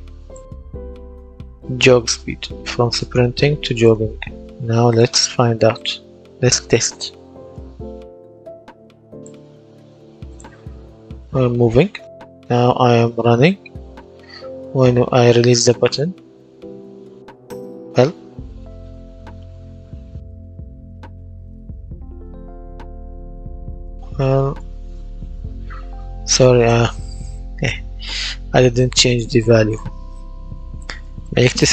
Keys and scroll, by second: 7.8 Escape, 10.7 w, 19.0 w, 25.0 Escape, 30.6 KP_3, 30.9 KP_0, 31.6 Return.